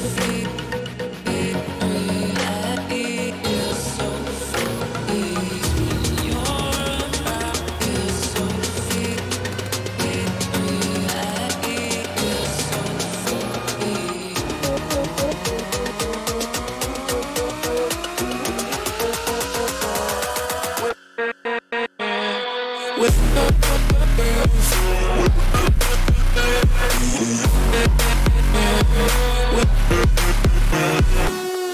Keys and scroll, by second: 7.9 ctrl+=, 10.0 ctrl+-, 10.3 ctrl+-, 10.8 ctrl+-, 15.5 ctrl+shift+n, 15.9 ctrl+shift+Return, 19.9 ], 26.0 ctrl+-.